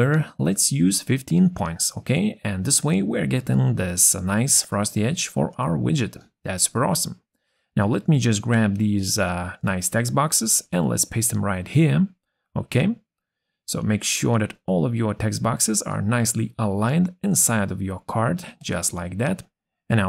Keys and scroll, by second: 9.4 ctrl+c, 11.6 ctrl+v.